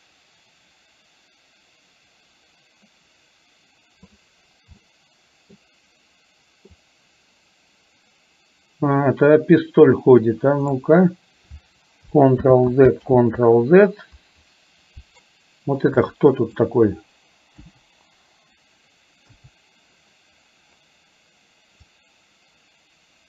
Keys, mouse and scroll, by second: 0.0-4.3 drag, 4.8 middle click, 6.9-10.9 drag, 12.5 ctrl+z, 13.2 ctrl+z, 16.0 click, 17.7 Delete, 19.5 a, 22.0-23.2 drag.